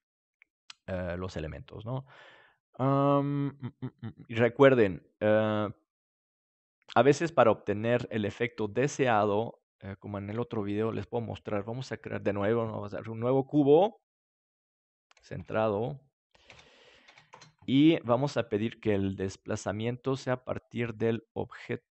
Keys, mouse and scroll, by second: 5.8 middle click, 6.3-8.9 drag, 8.0-10.3 middle drag, 10.2 KP_7, 13.8 click, 14.7 middle click, 15.1-21.3 drag, 18.0-21.3 right drag.